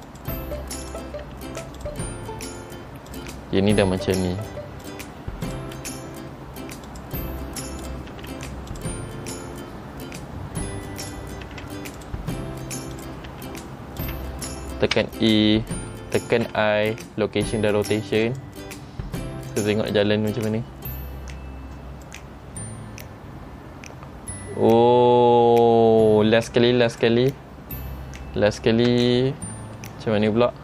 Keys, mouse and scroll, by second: 1.0 click, 1.4 r, 3.3 click, 3.8 r, 5.6 click, 5.9 r, 8.0 click, 8.3 r, 9.4-9.9 scroll down 1, 11.2 click, 11.6 r, 13.1 click, 13.4 r, 15.1 a, 16.5 i, 19.7 click, 20.8-21.3 scroll down 2, 22.2 click, 22.2-22.7 scroll down 2, 29.2-29.7 scroll up 2, 29.9 shift+middle click.